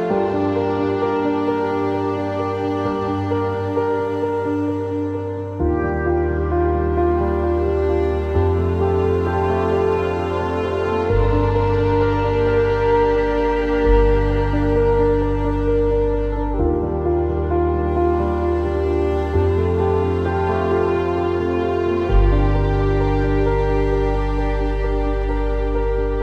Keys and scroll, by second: 5.2 ctrl+z, 16.9 w, 19.9 w, 23.3 e.